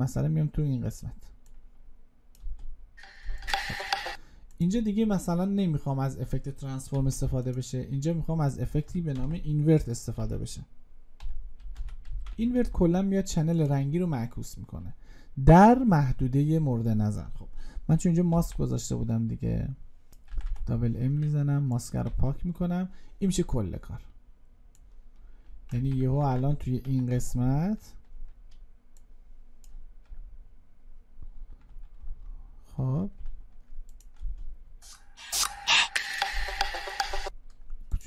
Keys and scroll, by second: 9.0 ctrl+space.